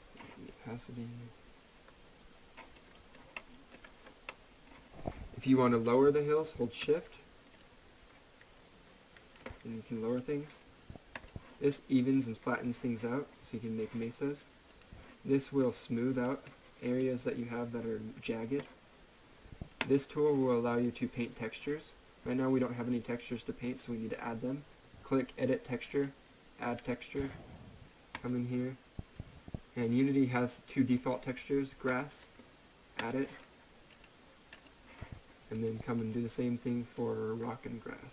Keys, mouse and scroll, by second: 2.8 right click, 3.4 middle click, 3.9 right click, 4.3 middle click, 7.6 shift+click, 7.9 shift+click, 11.1 click, 14.7 click, 19.8 click, 25.9 click, 26.9 click.